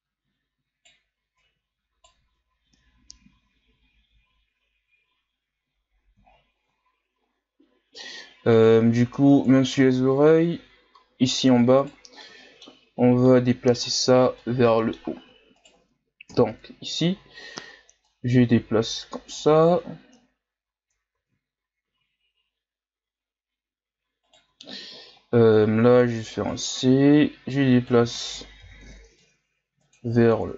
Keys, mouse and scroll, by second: 1.5 Right, 1.5 right click, 2.3 Tab, 2.7-4.0 scroll down 4, 4.0-5.6 scroll down 3, 5.6-6.2 scroll up 5, 6.2-6.8 shift+scroll down 4, 6.8-8.0 ctrl+scroll up 4, 8.0-8.5 ctrl+scroll down 2, 8.5 right click, 9.2 Tab, 10.0-11.0 shift+scroll down 1, 11.4 right click, 11.8 shift+right click, 12.2-14.0 middle drag, 14.0-14.4 scroll down 1, 14.4-15.5 middle drag, 15.5 shift+right click, 16.3 KP_1, 17.3-18.0 scroll up 1, 18.0-21.2 drag, 21.2 ctrl+z, 21.9 z, 24.2 right click, 24.4 c, 26.8 z, 27.5 click, 28.0 ctrl+z, 28.6 o, 29.2 click, 29.9-30.5 scroll down 3.